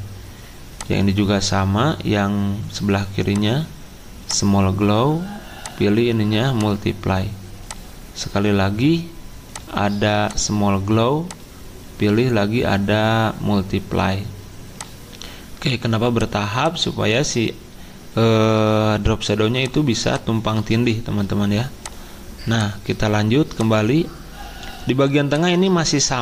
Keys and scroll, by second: 20.7 ctrl+z, 25.8 ctrl+z.